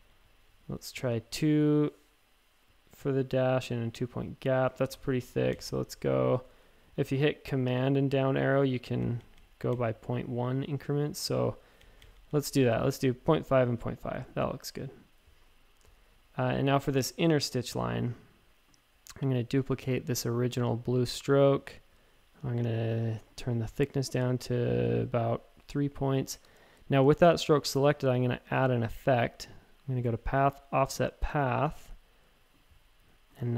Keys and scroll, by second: 0.0 Page_Down, 0.2 Page_Down, 4.9 shift+Tab, 5.5 Page_Down, 8.8 super+Page_Down, 9.0 super+Page_Down, 9.2 super+Page_Down, 11.0 Tab, 11.8 Down, 12.1 super+Page_Down, 12.3 super+Page_Down.